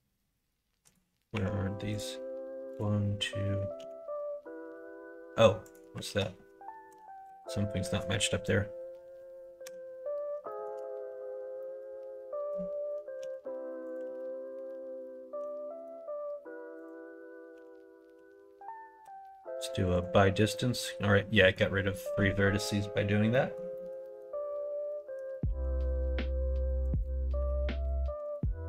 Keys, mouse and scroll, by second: 1.3 1, 2.7 click, 3.8 g, 6.0 ctrl+z, 6.8 KP_1, 7.2 KP_3, 9.6 /, 10.4 shift+middle click, 11.6 middle click, 13.2 g, 14.0 ctrl+z, 15.3 l, 15.8 right click, 16.8 click, 17.5 l, 18.1 l, 19.0 m, 21.3 middle click, 21.9 middle click, 23.3 middle click, 23.7 middle click, 24.0 middle click, 25.4 ctrl+r, 27.4 ctrl+r.